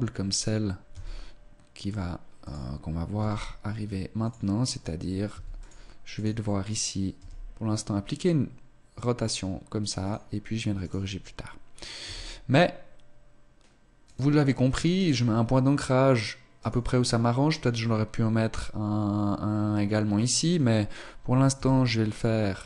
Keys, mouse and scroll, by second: 0.9 e, 2.5 click, 3.1 g, 5.3 s, 5.6 click, 5.9 right click, 7.1 r, 10.7 right click, 12.0 e, 14.9 right click, 16.5 right click, 20.3 right click, 21.5 e.